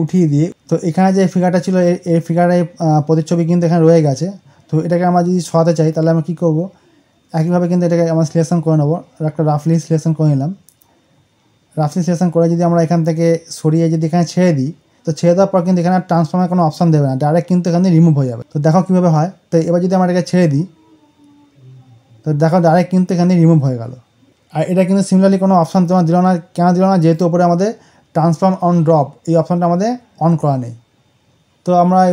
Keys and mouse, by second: 0.1 click, 7.3-18.3 drag.